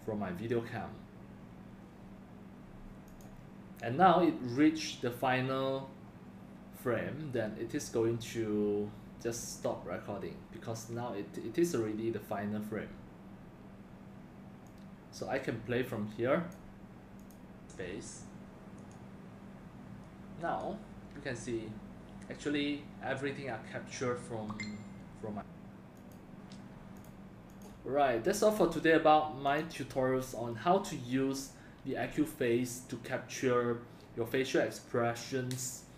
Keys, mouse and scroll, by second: 3.1 click, 17.2 click, 26.0 click, 27.0 click, 27.1 click.